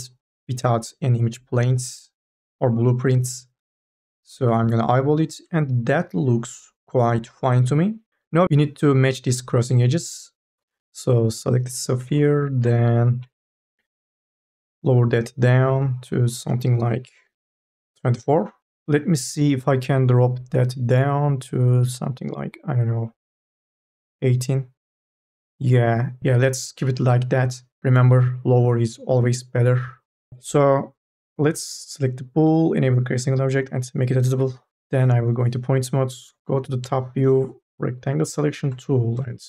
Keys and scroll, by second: 4.9 2, 33.5 c, 34.1 1, 36.7 KP_0.